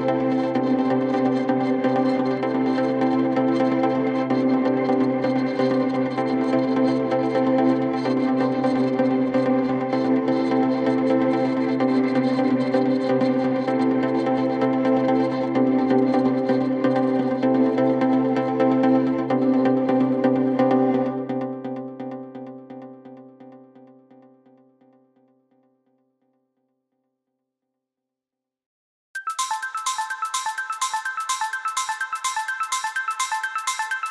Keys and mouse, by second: 3.1 shift+d, 11.5-34.1 middle drag, 11.9 d, 12.0 x, 12.9 s, 18.6 s, 29.2 shift+d, 29.9 x, 30.2 Tab, 30.6 click, 30.9 Tab, 32.1-34.1 typing, 32.7 click.